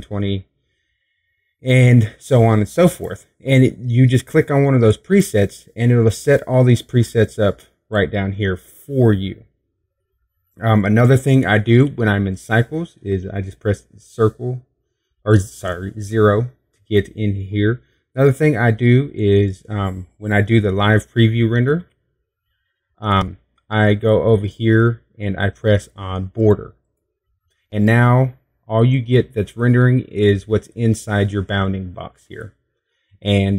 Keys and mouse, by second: 11.4 KP_0, 21.5 z, 22.0 middle click, 26.8-28.6 drag.